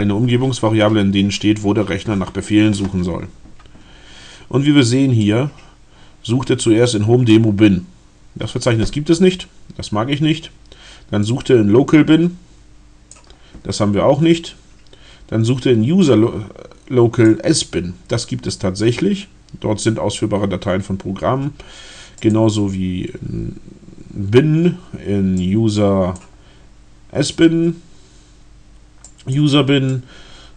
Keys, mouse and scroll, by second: 5.2-7.5 drag, 11.3-13.3 drag, 15.4-17.5 drag, 22.2 click, 25.4-26.4 drag, 29.1 click, 29.8-30.5 drag.